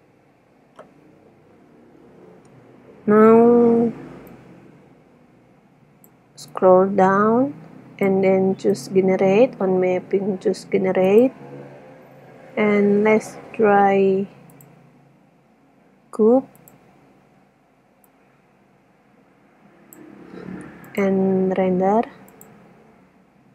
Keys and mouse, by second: 4.6 click, 10.1-11.2 drag, 14.8-16.4 drag, 17.1-18.1 middle drag, 19.8 middle click, 21.2-23.5 drag.